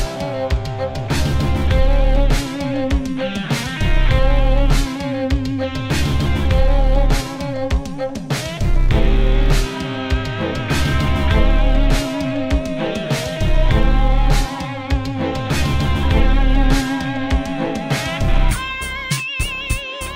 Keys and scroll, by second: 5.0 space, 5.3 space, 15.2-16.6 typing, 16.5 Caps_Lock, 16.8 Caps_Lock, 18.6 a, 18.9 BackSpace, 19.2 i.